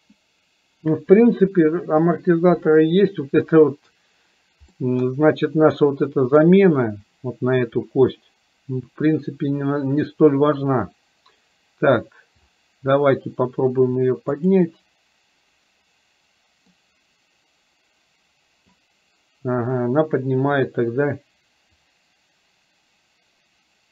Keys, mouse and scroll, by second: 4.9-6.5 middle drag, 14.4 click, 16.9-18.9 drag, 21.7-23.9 drag.